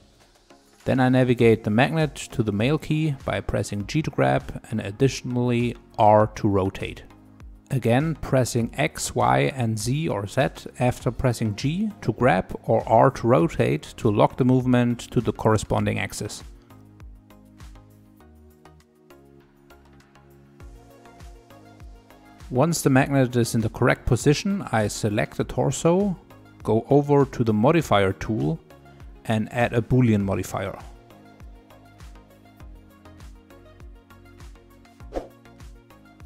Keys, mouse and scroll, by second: 0.0 shift+middle click, 0.8 click, 1.7 g, 3.3-5.6 middle drag, 5.6-6.6 scroll up 2, 6.6-7.1 scroll up 1, 7.1 r, 14.4-16.1 middle drag, 16.1 r, 17.2 middle click, 17.4-24.0 typing, 18.4 middle click, 18.5 scroll up 2, 18.6 shift+middle click, 19.2 middle click, 19.3 scroll up 1, 19.4 shift+middle click, 20.2 middle click, 20.7 middle click, 21.1 middle click, 22.0 middle click, 22.3 scroll up 1, 22.4 middle click, 22.9 middle click, 23.7 middle click, 23.7 scroll down 2, 23.8 middle click, 23.9 click, 24.4 click, 24.5 middle click, 24.8-26.1 middle drag, 27.0-27.7 scroll down 3, 27.7-29.2 scroll up 1, 29.2 click, 33.0 click, 34.4 click.